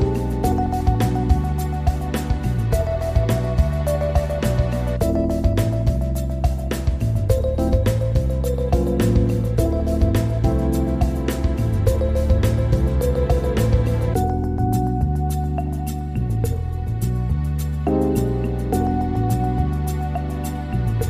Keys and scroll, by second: 13.7 Delete.